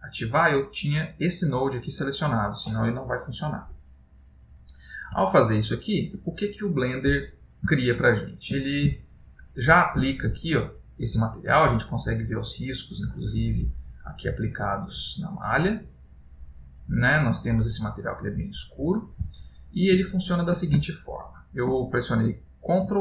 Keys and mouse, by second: 3.0 middle click, 7.9 ctrl+middle click, 9.3 shift+middle click, 10.5 middle click, 12.8 middle click, 15.9 middle click, 20.1 middle click.